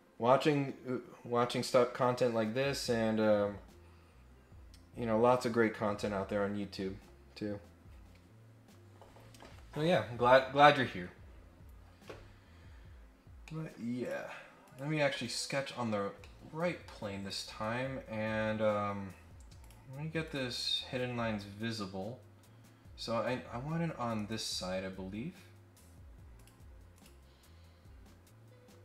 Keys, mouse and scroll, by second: 12.8 scroll down 2, 13.1 scroll up 2, 13.4 middle click, 14.0 click, 14.6 click, 16.2 middle click, 17.2 click, 18.1 scroll up 1, 18.3-18.7 scroll down 3, 18.9 scroll up 2, 19.6 click, 20.2 click, 20.7-21.2 scroll up 4, 23.5 scroll down 1, 23.7 scroll up 1, 24.1 right click, 24.7-25.0 scroll up 4, 26.3 click, 26.9 click.